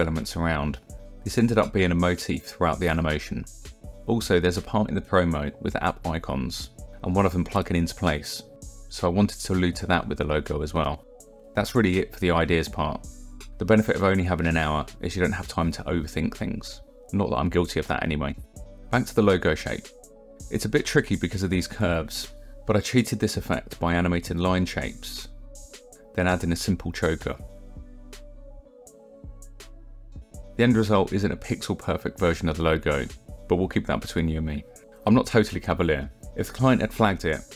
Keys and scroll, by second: 25.9 space.